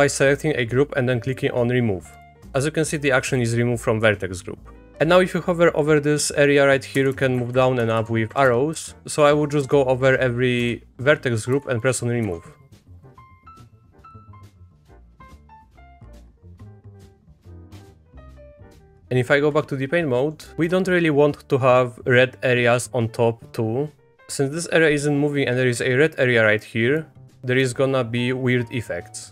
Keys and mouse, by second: 2.2 click, 6.9 Down, 7.1 Down, 7.4 Up, 7.5 Up, 7.8 Down, 8.0 Down, 8.3 Up, 8.4 Up, 8.7 Down, 9.0 Down, 9.0 typing, 9.2 click, 9.6 Down, 10.1 click, 10.6 Down, 11.0 click, 11.5 Down, 11.9 click, 12.2 Down, 12.6-13.0 drag, 13.0 Down, 13.6 Down, 13.8 drag, 13.9 Down, 14.0 click, 14.2 Down, 14.4 click, 14.5 Down, 14.7 click, 14.8 Down, 15.0 drag, 15.2 Down, 15.4 click, 15.6 Down, 15.7 click, 15.9 Down, 16.2 Down, 16.4 drag, 16.5 Down, 16.7 click, 16.9 drag, 17.0 Down, 17.2 click, 17.4 Down, 17.6 click, 17.7 Down, 17.9 click, 18.1 Down, 18.8 click, 18.8 typing, 18.8 Tab, 19.0-20.7 drag, 26.7 middle click, 27.4 middle click.